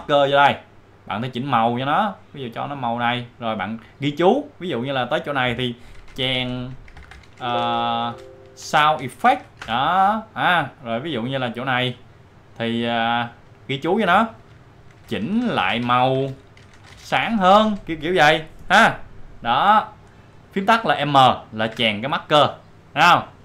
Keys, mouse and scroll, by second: 1.2 click, 2.7 click, 4.0 click, 6.1-8.6 typing, 9.6 Return, 11.0-12.4 drag, 14.3 click, 14.7-18.2 typing, 19.8 click, 21.7 m, 22.7-23.4 drag.